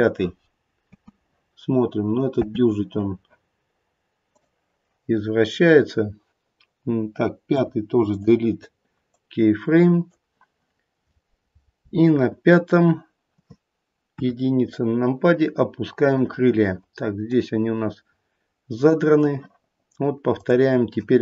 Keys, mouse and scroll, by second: 0.8 space, 2.4 space, 4.2 click, 9.1 click, 14.1 KP_1, 14.5-17.1 scroll down 3, 17.3 click.